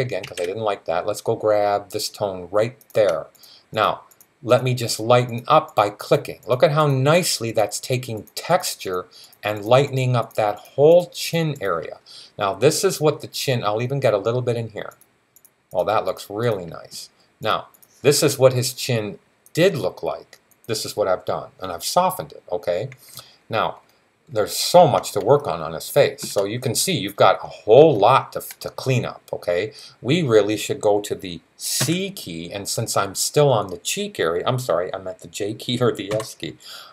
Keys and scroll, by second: 0.0 alt+super+z, 31.6 c, 35.9 j.